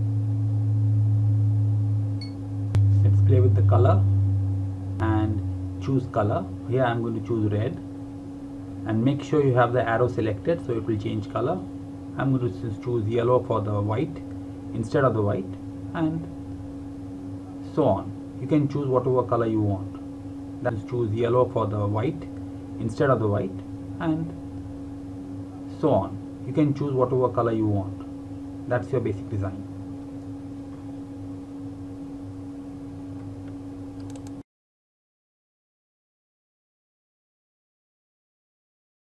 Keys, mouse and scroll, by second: 0.6 click, 2.2 space, 2.7 click, 5.7 click, 9.3 ctrl+Num_Lock, 9.6 ctrl+a, 12.7 click, 32.7 click.